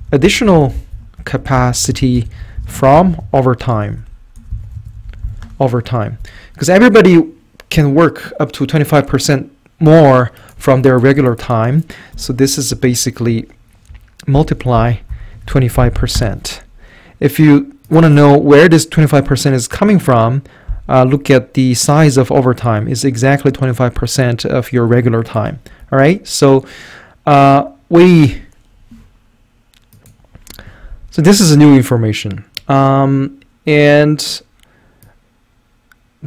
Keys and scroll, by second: 0.0-5.9 typing, 11.9-12.6 typing, 12.7 Up, 14.4-16.1 typing, 16.2 Return, 18.0 typing, 25.8 Escape.